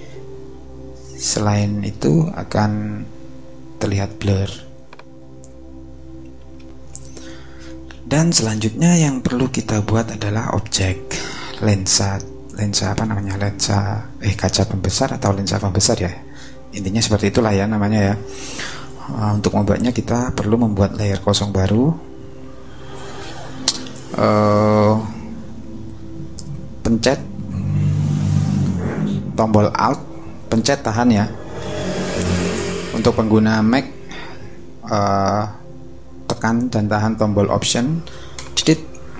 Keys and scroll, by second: 6.6 shift+super+i.